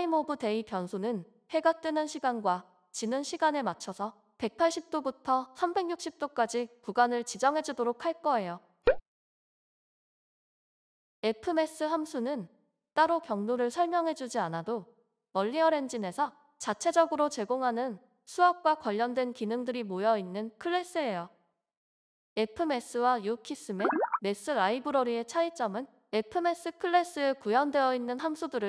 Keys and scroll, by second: 5.0-6.5 typing, 20.2 ctrl+c, 21.3 Return, 23.7 ctrl+v.